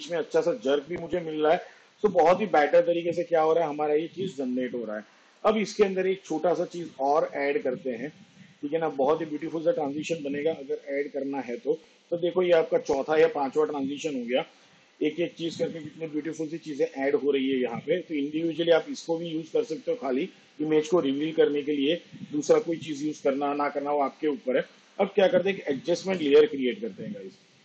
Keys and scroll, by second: 5.5 space, 26.3 ctrl+alt+y.